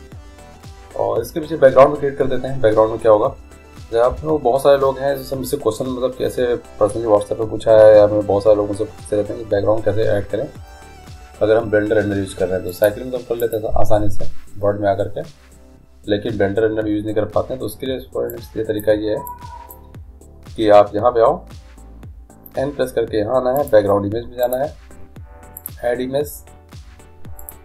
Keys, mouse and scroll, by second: 4.3 n, 12.9-14.8 drag, 18.5-21.3 drag, 23.8-27.6 drag.